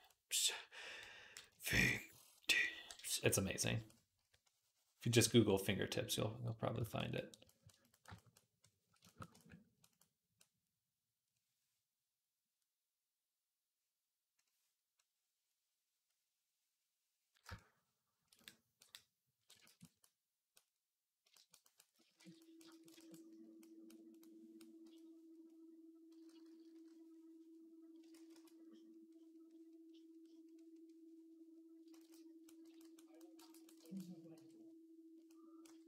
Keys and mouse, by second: 0.9 click, 1.5 shift+click, 1.5 shift+middle click, 1.5 shift+right click, 2.6-6.8 drag, 2.6-6.8 middle drag, 2.6-6.8 right drag, 4.0 v, 18.8-21.9 drag, 22.0 alt+q, 24.7 p, 26.0-26.6 typing, 28.0 ctrl+z, 28.2 ctrl+z, 31.8 ctrl+z, 32.5 v, 33.7 ctrl+click, 34.2 v, 35.5-35.8 typing.